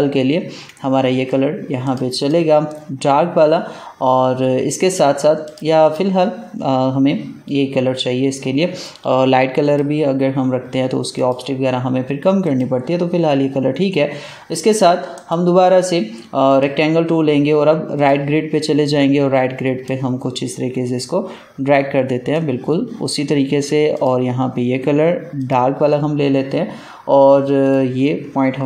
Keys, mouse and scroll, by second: 1.7 click, 5.3 click, 9.5 click, 15.1 right click, 16.4-23.9 drag.